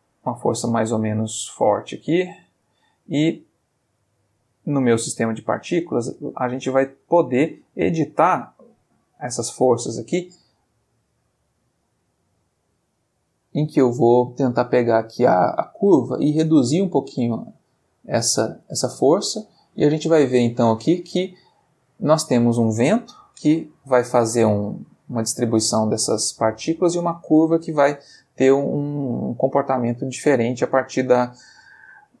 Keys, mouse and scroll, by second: 0.6 click, 1.5 click, 2.1 click, 2.7 click, 5.0 click, 7.1 click, 7.7 middle click, 8.3 middle click, 16.2-17.7 drag, 18.7-20.3 drag, 23.2 click, 23.7 g, 25.4 click.